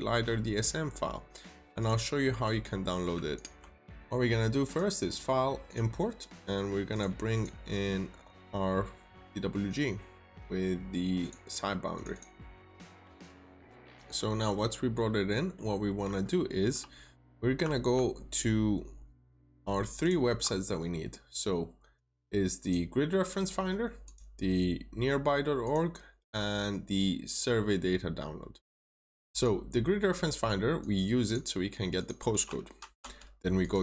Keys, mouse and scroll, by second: 0.1-0.7 scroll down 1, 0.7-1.7 scroll up 1, 1.7 click, 3.2 shift+click, 3.7 click, 7.2 double click, 9.3-9.7 scroll down 1, 9.7-10.0 scroll up 1, 11.1 click, 12.0 double click, 12.5 click, 14.0 scroll down 1, 14.2 middle click, 14.7-15.1 scroll up 1, 15.1 scroll down 1, 15.2 middle click, 17.6 alt+Tab, 19.9 alt+click, 21.9 click, 29.2 double click, 30.0-30.7 scroll down 1, 30.7 click, 32.7 typing, 33.5 click.